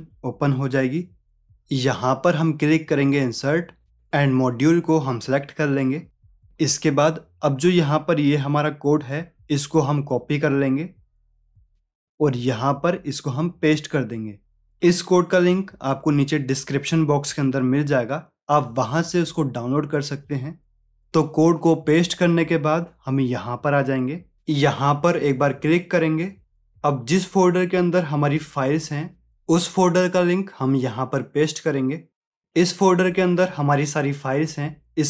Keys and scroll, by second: 9.1 ctrl+a, 9.8 ctrl+c, 13.1 ctrl+v.